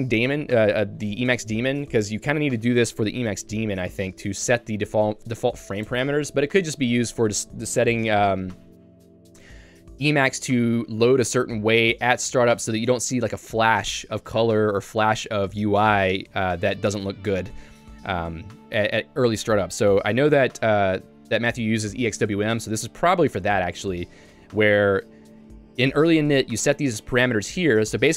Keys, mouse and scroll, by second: 17.4 Escape, 17.7 j, 19.0 k.